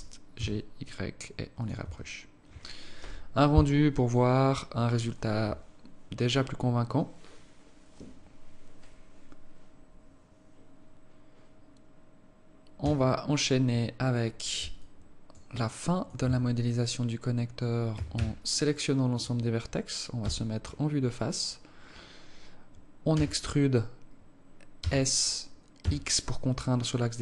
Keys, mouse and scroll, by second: 1.9 Tab, 12.9 Escape, 13.8-14.2 scroll down 6, 14.8 alt+click, 15.7 alt+click, 16.3 Tab, 16.8-17.2 scroll up 2, 18.0 a, 18.2 a, 20.3 KP_1, 23.2 e.